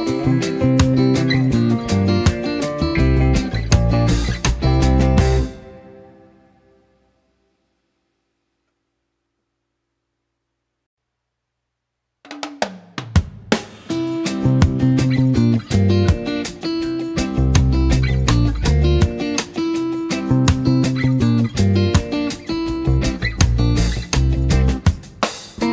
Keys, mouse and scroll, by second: 1.1 space, 1.3 click, 1.4 z, 1.7 click, 1.9 space, 2.1 click, 2.5 space, 4.2-8.1 drag, 15.9-16.7 alt+shift+drag, 20.7 space, 21.0 z, 21.3 click, 21.4 space, 21.7 click, 22.3 space, 22.4 click, 23.6 space, 24.0-24.3 click, 24.3 space, 24.4-25.4 v.